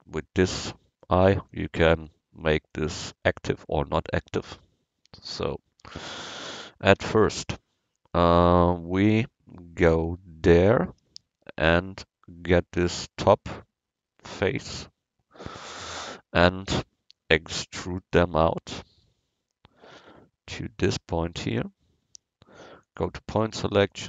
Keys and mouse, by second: 0.6-4.9 drag, 5.3 KP_1, 10.6 Tab, 11.6-13.8 middle drag, 14.5-15.6 middle drag, 15.6 KP_1, 16.9-18.5 middle drag, 18.2 e, 18.9-21.0 drag.